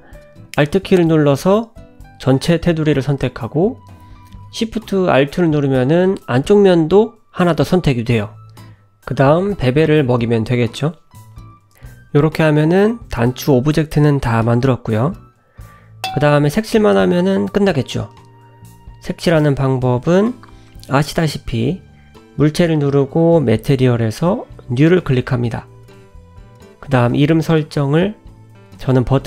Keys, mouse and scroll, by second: 3.4 alt+shift+click, 5.0 ctrl+b, 9.3 Tab, 10.0 middle click, 11.5-12.4 scroll down 10, 12.9 scroll down 1, 13.2 shift+middle click, 14.6 `, 15.2 scroll up 2, 15.8 shift+middle click, 16.2 g, 17.2 scroll down 4, 17.5 middle click, 18.3 scroll up 1, 18.6 click, 19.0-20.5 scroll up 4, 21.3 click, 22.4 click, 23.3 click, 23.8 click, 25.7 t, 28.9 t.